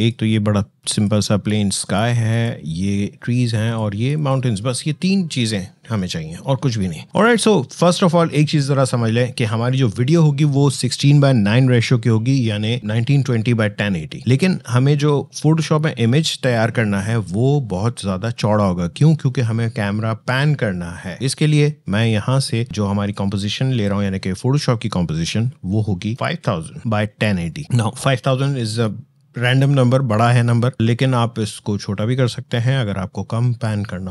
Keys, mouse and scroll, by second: 0.3-0.7 scroll up 1, 0.7 click.